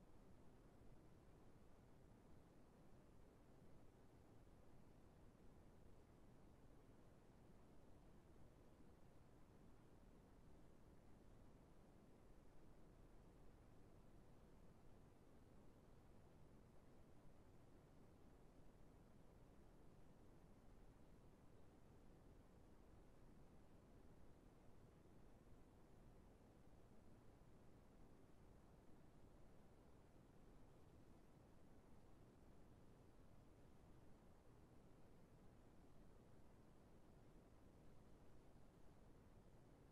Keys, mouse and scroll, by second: 6.0 middle click, 9.5 middle click, 13.7-14.2 scroll down 1, 14.2 middle click, 18.1 middle click, 18.1 right click, 22.0 right click, 29.7 middle click, 29.7-30.5 scroll down 1, 30.9 right click, 31.6 right click, 32.1-32.6 scroll down 1, 32.6 middle click, 36.0 middle click, 36.9 scroll down 1, 37.1 middle click, 39.6 middle click.